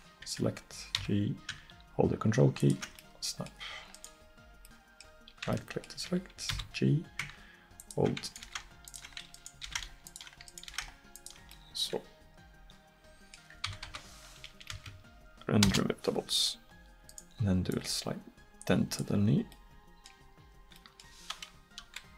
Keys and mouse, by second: 1.0 g, 4.0 click, 6.6 g, 8.5 g, 9.7 g, 10.7 g, 13.7 a, 13.9 a, 14.7 space, 17.3 right click, 19.0-21.0 drag, 21.8 KP_1.